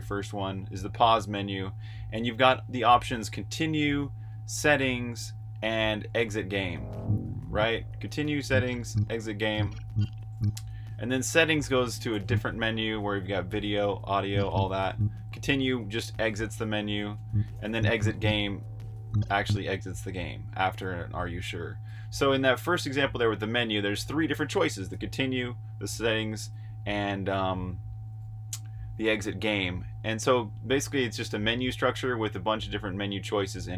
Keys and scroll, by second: 1.2 typing, 6.8 Escape, 8.2-10.6 typing, 11.9-12.7 typing, 13.8-14.7 typing, 15.9-19.4 typing, 21.5-22.9 typing, 24.0-27.9 typing.